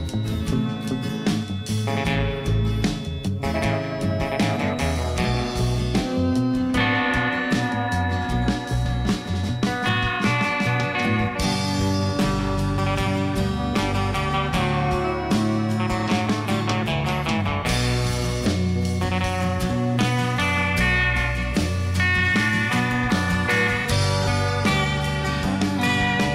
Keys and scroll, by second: 1.1 Tab, 1.3 alt+a, 4.1 shift+a, 5.2 Tab, 5.5 s, 6.5 g, 6.6 z, 7.6 g, 7.7 y, 11.4 g, 11.6 z, 12.7 i, 13.7 e, 16.3 e, 17.2 s, 17.7 e, 19.1 e, 19.7 s, 20.2 e, 21.7 i, 22.2 e, 23.8 alt+w, 24.6 i, 25.7 i.